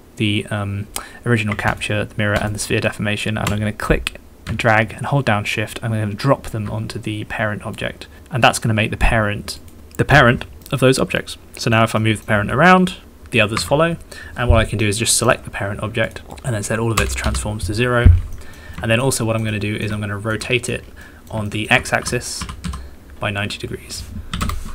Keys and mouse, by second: 10.7-11.8 drag, 10.7-11.8 middle drag, 10.7-11.8 right drag, 12.0 middle click, 12.9 g, 14.2 Escape, 14.8 click, 16.1 click, 16.4-17.8 drag, 18.3 click, 18.7 shift+middle click, 19.2 shift+middle click, 19.5 middle click, 19.9 shift+middle click, 20.4 middle click, 21.0 middle click, 21.5 shift+middle click, 22.0 e, 22.4 r, 23.5 x.